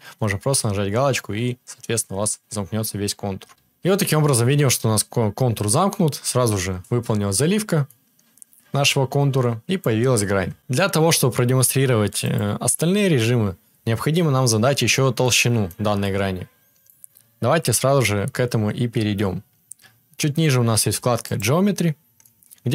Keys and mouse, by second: 10.3 KP_7, 12.3-22.7 drag.